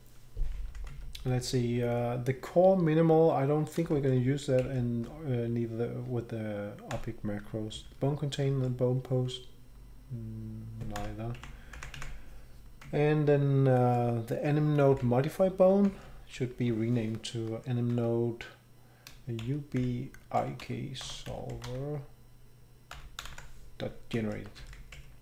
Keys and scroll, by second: 0.9 Right, 4.6 shift+Down, 6.9 Delete, 7.8 shift+Down, 8.5 shift+Down, 11.0 Delete, 11.7 Up, 11.9 Down, 12.8-13.6 Right, 15.0 Right, 16.1 shift+Right, 16.2 shift+Right, 19.4-23.8 typing, 24.3 Escape, 24.6 Down, 24.8 Right.